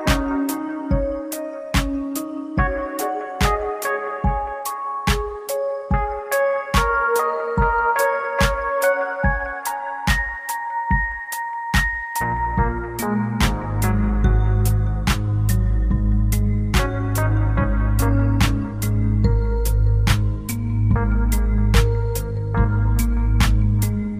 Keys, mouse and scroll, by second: 5.3 click, 13.0 middle click, 15.1 click, 16.1 click.